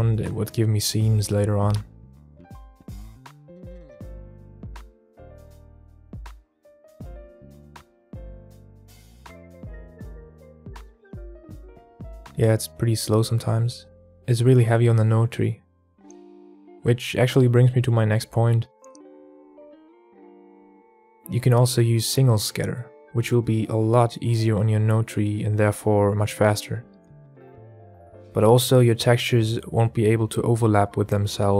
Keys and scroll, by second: 2.9 shift+a, 12.9 shift+a.